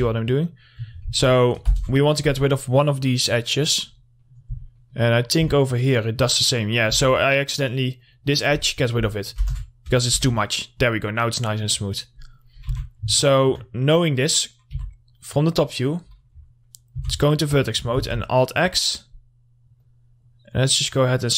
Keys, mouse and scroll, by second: 0.0-0.1 typing, 0.3 click, 3.2-4.4 scroll down 1, 4.4 middle click, 4.7-5.0 scroll down 1, 5.0 middle click, 5.3-5.6 scroll up 1, 5.6 Tab, 5.9 middle click, 6.8 click, 7.1 Tab, 7.2-7.5 scroll up 1, 8.1 click, 10.1 Tab, 11.0-11.6 scroll down 1, 11.6 middle click, 12.0 click, 12.4 middle click, 12.7 scroll up 1, 12.8 Tab, 13.3 middle click, 15.5 click, 15.8 middle click, 16.2 scroll up 1, 17.1 1, 17.5 middle click, 18.1 alt+x, 18.7-21.3 drag.